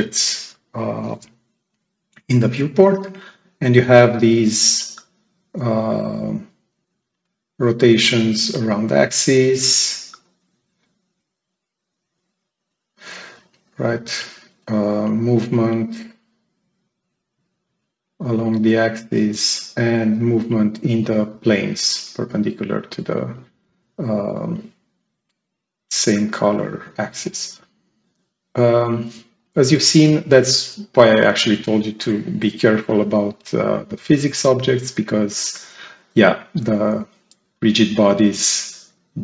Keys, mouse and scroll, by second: 3.0-5.1 drag, 7.1-13.2 drag, 13.7-14.1 drag, 14.8-17.2 drag, 18.3-18.7 drag, 19.8-21.1 drag, 29.3-30.6 right drag, 29.8-30.2 drag, 34.6-35.1 right drag, 37.9 click, 38.5 click.